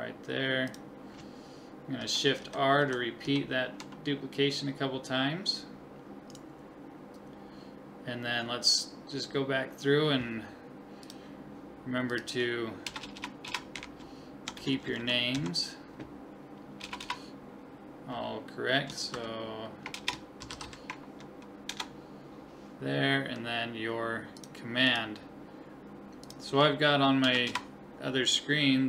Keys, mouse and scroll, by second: 2.0 shift+r, 2.4 shift+r, 2.8 shift+r, 3.2 shift+r, 6.3 right click, 11.0-12.8 drag, 13.0 BackSpace, 13.1 BackSpace, 14.7 Left, 14.8 Left, 17.0 BackSpace, 24.4-26.4 drag, 27.5 BackSpace.